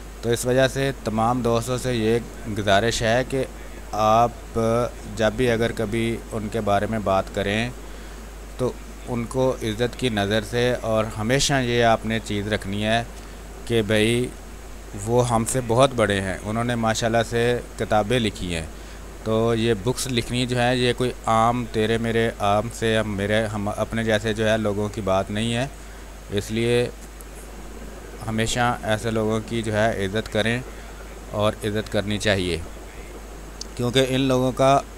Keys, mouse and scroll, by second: 1.0 click, 2.0 space, 2.3 click, 2.5 space, 3.5 click, 4.6 space, 4.8 click, 5.1 space, 5.7-7.4 drag, 7.4 space, 7.6 click, 9.0-10.9 drag, 10.9 space, 11.6 alt+click, 12.1 click, 13.4 ctrl+click, 13.7 click, 14.5 r, 14.6 click, 15.5 b, 15.8 space, 15.9 click, 16.3 space, 16.8 ctrl+click, 17.2 x, 17.6 click, 18.8 x, 19.5 click, 20.4 x, 20.7-24.5 drag, 24.5 space, 24.7 click, 25.0 space, 28.0-29.8 drag, 29.8 space, 30.0 click, 30.3 space, 31.0 click, 32.1 space, 32.2 click, 32.5 space, 33.7-34.9 drag.